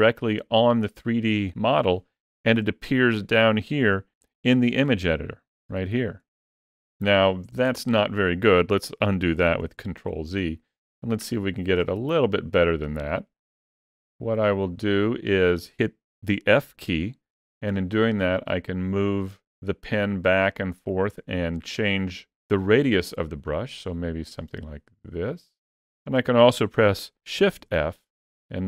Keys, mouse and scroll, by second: 4.0 shift+middle click, 4.7 ctrl+middle click, 5.9 shift+middle click, 9.5 ctrl+z, 10.8 shift+middle click, 12.0 ctrl+middle click, 12.9 middle click, 16.5 f, 27.4 shift+f.